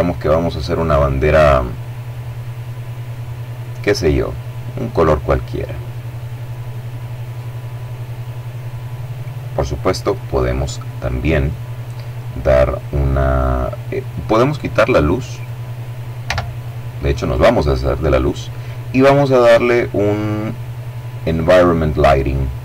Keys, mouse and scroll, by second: 4.7-7.3 drag, 10.1-11.3 middle drag, 13.4-14.0 scroll down 1, 14.7 right click, 15.6 x, 15.9 click, 18.4-19.3 scroll down 2, 20.6 click, 22.0 click.